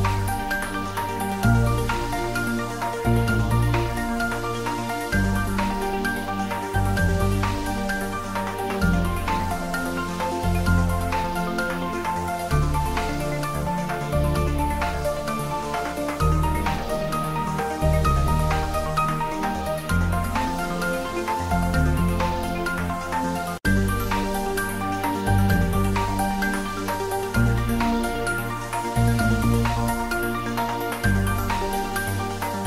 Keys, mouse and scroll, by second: 0.0-0.7 typing, 1.4 click, 1.8 ctrl+s, 2.1 middle click, 2.9 ctrl+middle click, 3.5 click, 3.6-6.7 middle drag, 7.2 ctrl+s, 7.5 shift+click, 8.6-10.5 ctrl+middle drag, 10.5 ctrl+middle click, 11.4 click, 12.3 g, 13.1 click, 13.5 r, 15.4 click, 17.0 shift+middle click, 17.7-19.2 typing, 23.7 click, 23.9 ctrl+z, 24.3-25.2 typing, 26.4 click, 26.6 ctrl+z, 28.0 click, 29.1 shift+z, 29.4-30.8 shift+middle drag, 30.8 shift+right click, 31.2 ctrl+middle click, 31.6 shift+a, 32.5 click.